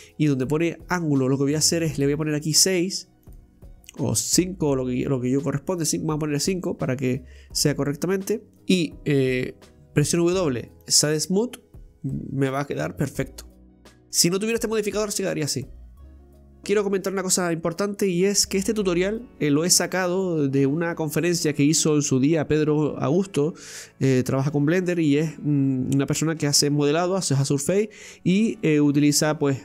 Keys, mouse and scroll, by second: 2.7-8.6 drag, 10.9 w, 12.1-15.1 middle drag, 15.1 drag, 15.6-16.6 middle drag, 16.6-19.6 scroll up 1.